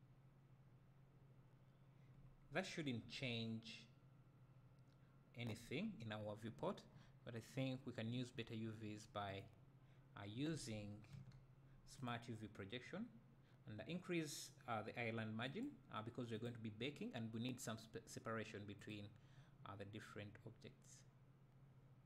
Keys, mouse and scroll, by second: 2.2-2.8 scroll up 2, 2.8 scroll down 2, 3.0 `, 15.6-21.0 drag.